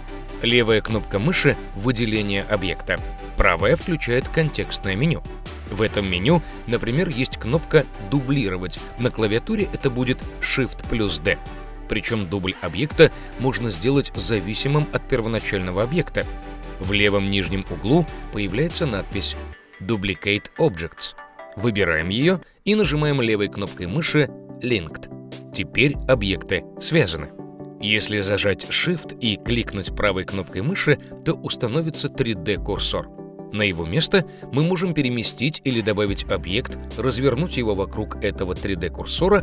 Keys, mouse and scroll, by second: 0.5-3.1 drag, 3.3-6.3 right drag, 7.4 shift+d, 18.9 shift+d, 30.4-33.2 shift+right drag, 31.9 shift+Tab, 36.4 shift+s.